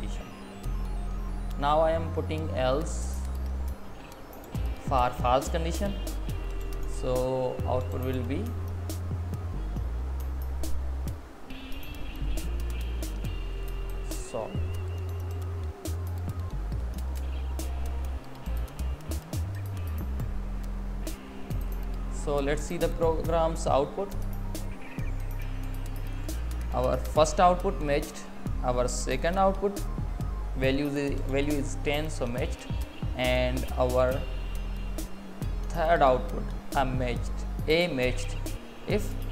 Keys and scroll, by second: 0.0 Down, 0.3 Up, 3.3 space, 4.4 Left, 5.3 Up, 8.0 Tab, 10.3 Down, 12.2 Left, 18.4 Right, 19.4 Left, 20.4 Right, 21.1 Down, 21.7 Up.